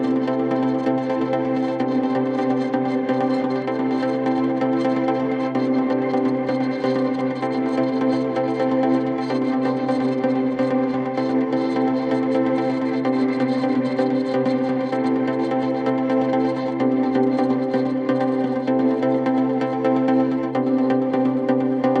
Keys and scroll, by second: 19.3 ctrl+z, 20.1 ctrl+z, 20.6 ctrl+shift+z.